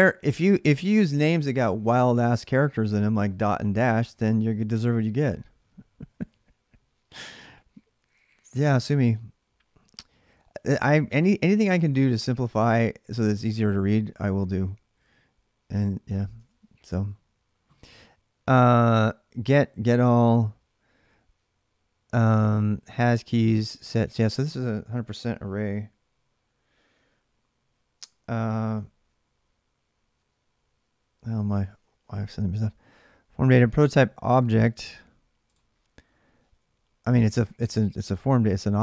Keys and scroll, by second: 5.9 alt+Tab, 11.6 alt+Tab, 16.1 alt+Tab.